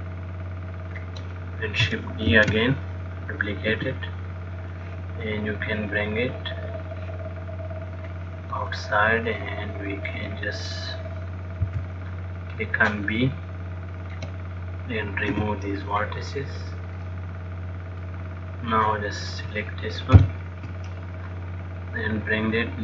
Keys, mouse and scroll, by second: 3.1 shift+d, 5.0 click, 8.9 click, 9.6 middle click, 11.9 b, 15.5 x, 17.3 middle click, 19.0 click, 20.5 ctrl+l, 21.9 click.